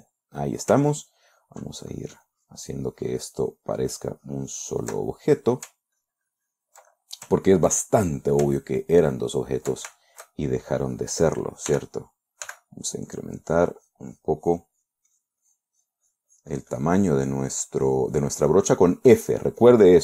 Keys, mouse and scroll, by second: 0.5-1.2 middle drag, 1.2 ctrl+click, 1.6-5.3 ctrl+drag, 5.4-6.2 ctrl+middle drag, 6.5 ctrl+click, 7.3-7.8 ctrl+middle drag, 8.3-8.8 ctrl+middle drag, 9.0-9.5 ctrl+middle drag, 9.9 ctrl+middle click, 10.5-11.1 ctrl+shift+middle drag, 11.3 ctrl+shift+click, 12.2 d, 12.9 f, 13.5 click, 13.9-20.0 drag.